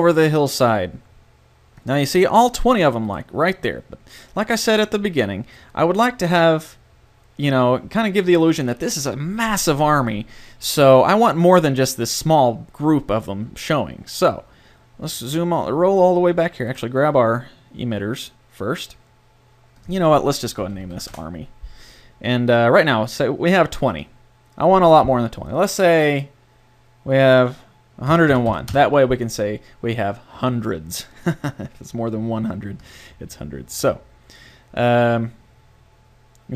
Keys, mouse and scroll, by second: 1.8-3.1 drag, 3.1-4.8 right drag, 16.1-17.9 middle drag, 17.9 right click, 19.8-21.6 drag, 23.9-25.7 drag, 31.1 click.